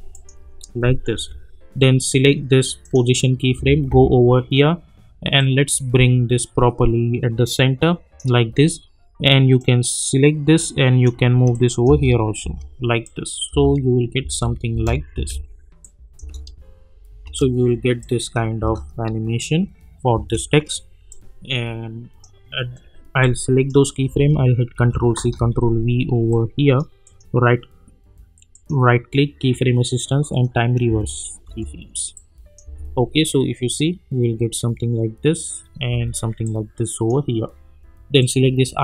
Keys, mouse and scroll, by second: 0.1 click, 1.1 j, 2.9 click, 3.5 k, 3.9 k, 5.4-8.2 drag, 11.9 space, 13.0-13.6 click, 13.5 space, 15.8-16.4 click, 16.2 space, 18.0-18.6 click, 18.6 space, 21.1-22.3 drag, 24.7 ctrl+c, 25.1 ctrl+v, 26.3-26.9 click, 27.0 right click, 30.3 click, 30.9 space, 32.1-32.7 click, 32.6 space, 35.9 space, 36.4-37.4 drag.